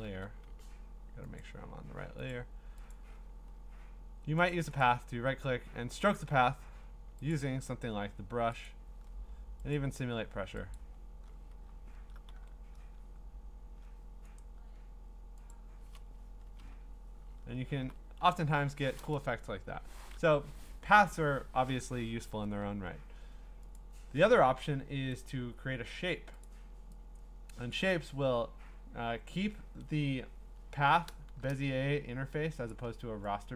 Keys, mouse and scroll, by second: 0.0 a, 1.4 click, 2.3 click, 2.9 click, 4.5 click, 4.8 right click, 6.9 click, 7.5 click, 11.8 scroll, 12.4 d, 14.4 right click, 15.5 click, 16.4 Return, 17.6 scroll, 19.5 Delete, 21.9 Delete, 23.8 click, 25.3 click, 29.7 a, 30.1-30.8 scroll, 31.3 a, 32.7 click.